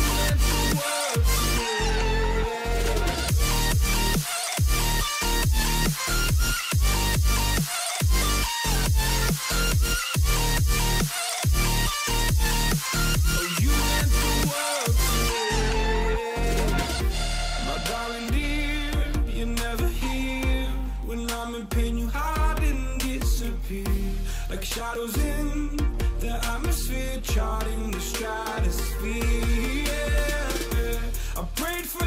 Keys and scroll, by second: 13.6 ctrl+shift+x.